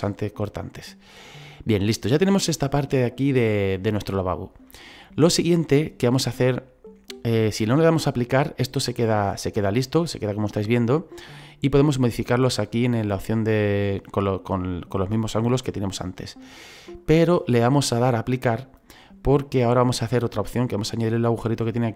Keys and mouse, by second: 0.4 middle click, 4.7 middle click, 5.7 shift+middle click, 11.8 click, 13.3 middle click, 17.0 click, 18.6 click, 19.4 middle click, 20.5 shift+middle click, 21.7 click.